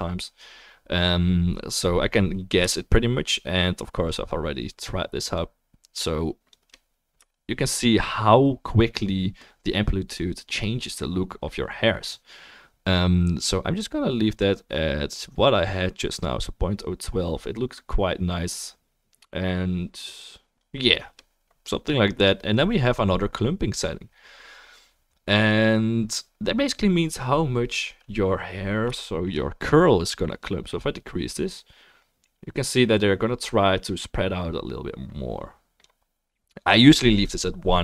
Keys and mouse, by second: 9.8-27.8 shift+drag, 9.8-31.8 shift+middle drag, 9.8-27.8 shift+right drag, 31.8-37.8 drag.